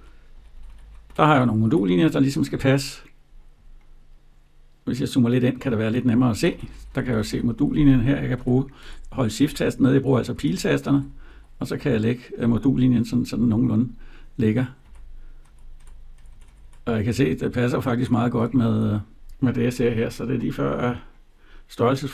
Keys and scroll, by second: 1.1 Right, 6.1 Down, 8.3 shift+Down, 10.0 shift+Right, 10.7 shift+Down, 14.6 Down, 15.2 Right, 16.9 Down, 17.4 Right, 18.1 Up, 18.5 Down.